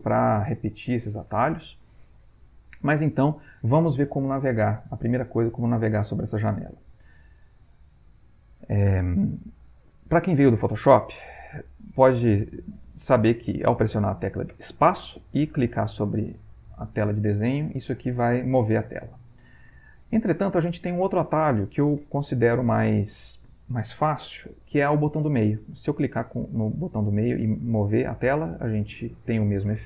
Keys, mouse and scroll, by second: 15.1 space, 15.6-20.8 drag, 28.0-29.8 drag.